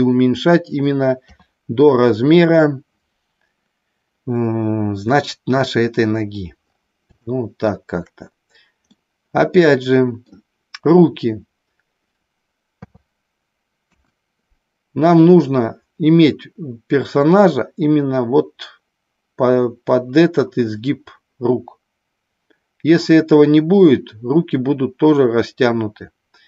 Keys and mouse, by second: 1.2 KP_3, 7.2 shift+middle click, 8.9-10.2 middle drag, 12.7 KP_3, 13.9 KP_1.